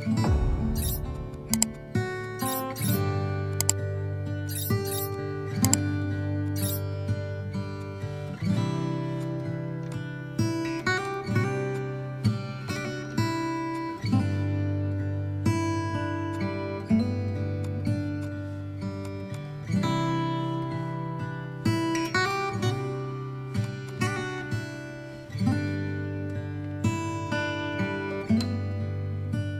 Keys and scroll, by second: 17.2 b.